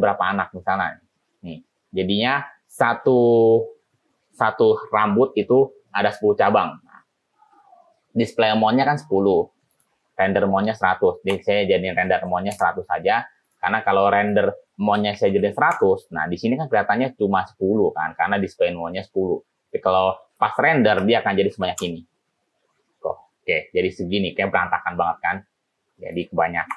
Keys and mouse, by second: 0.0 click, 9.8-13.3 drag, 14.6-16.4 drag, 15.6 o, 20.5-23.0 drag, 21.6 0, 26.3-26.7 drag.